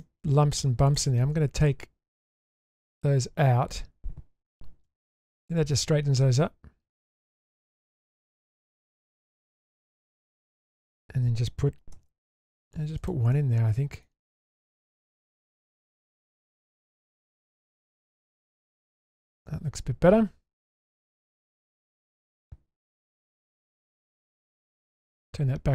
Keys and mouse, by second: 0.0 middle click, 0.9 alt+click, 2.8-3.7 middle drag, 4.8 ctrl+x, 5.4-7.5 middle drag, 8.0 shift+middle click, 8.3-10.9 middle drag, 11.9 ctrl+r, 13.3-14.0 middle drag, 14.7-15.3 middle drag, 15.5 Tab, 16.0-16.5 middle drag, 16.8-17.2 middle drag, 17.7 shift+space, 18.5 shift+middle drag, 19.1 Tab, 19.5-21.7 middle drag, 22.3-22.9 middle drag, 23.7-24.6 middle drag.